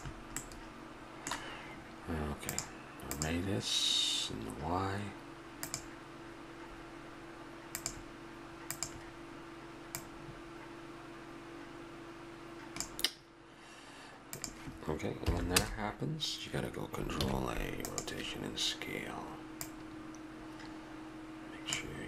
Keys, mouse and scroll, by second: 0.4-2.5 middle drag, 2.5-5.1 drag, 7.7-11.9 drag, 14.4-16.2 drag, 17.2 ctrl+a, 19.6-21.5 drag.